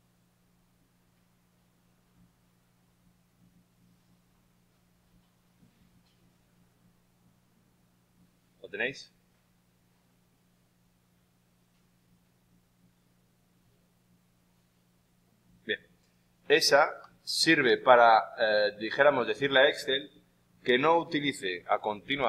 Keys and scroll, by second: 22.1 shift+Right.